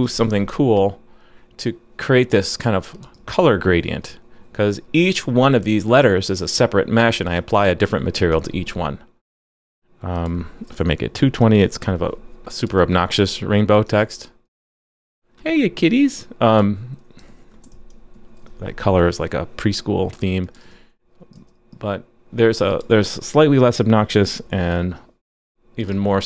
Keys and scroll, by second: 11.4 super+s, 24.8 super+s.